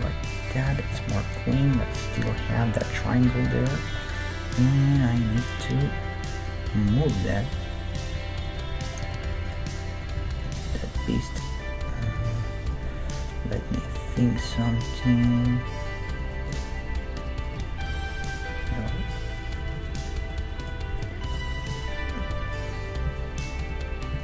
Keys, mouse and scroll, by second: 0.1 g, 0.2 middle click, 0.4 right click, 1.7 g, 3.1 g, 4.6-5.8 middle drag, 7.9 right click, 8.1 g, 8.8-10.9 middle drag, 9.3 right click, 10.0-12.4 right drag, 10.2 g, 10.7 g, 12.2 g, 13.1-16.1 middle drag, 16.1-19.4 right drag, 16.6 ctrl+Tab, 17.9 ctrl+r, 18.6 ctrl+e, 19.2 click, 19.8 ctrl+e, 20.3-23.0 middle drag, 23.1 ctrl+e, 24.1 ctrl+e.